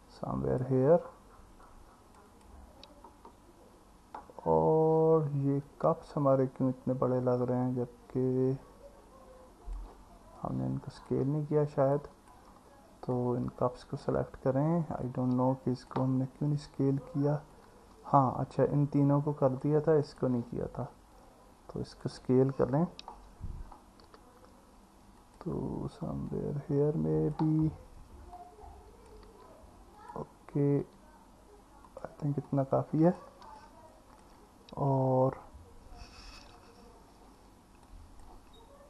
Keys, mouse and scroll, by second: 1.7 click, 2.3 click, 5.7-9.8 drag, 10.4-11.1 drag, 13.2-14.0 drag, 15.1 click, 17.6 click, 20.1 click, 21.2 click, 24.1 s, 26.3 click, 28.3 click, 29.3 s, 30.8 s, 32.5 click, 33.6-34.2 alt+middle drag, 36.6 KP_1, 37.9 click.